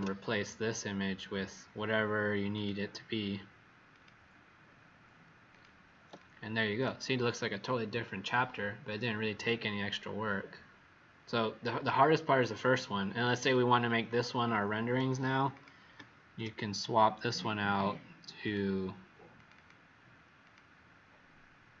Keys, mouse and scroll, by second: 2.5 click, 6.1 click, 12.1-13.6 scroll up 25, 13.6 scroll down 2, 15.4 click, 16.2 ctrl+d, 18.4 click, 19.5 click, 20.4 click.